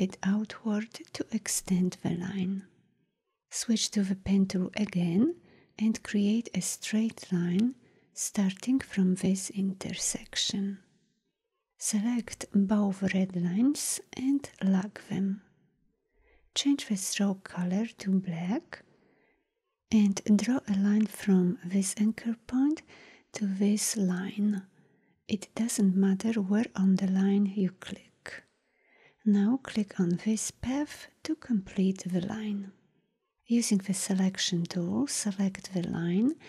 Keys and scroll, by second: 4.1 p, 12.7 v, 14.6 ctrl+2, 19.3 p, 34.0 v.